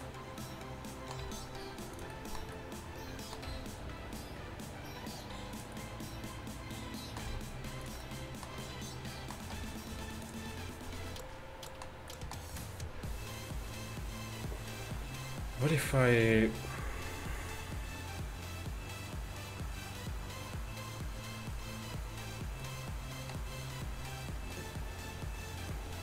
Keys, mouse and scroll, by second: 1.3 e, 3.5 g, 9.6 r, 10.3 g, 10.9 middle click.